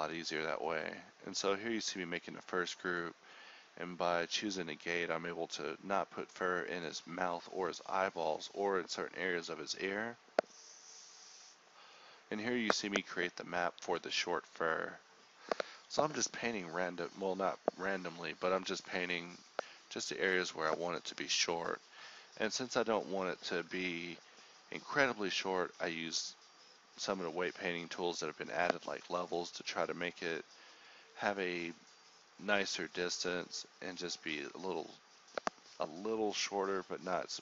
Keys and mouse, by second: 4.0-5.1 drag, 8.4-12.5 drag, 13.3-18.1 drag, 18.1 middle click, 18.7-19.9 drag, 19.9 middle click, 20.2-22.5 drag, 22.6-23.1 drag, 23.8 click, 27.4-28.5 drag, 28.8 click, 35.0 click.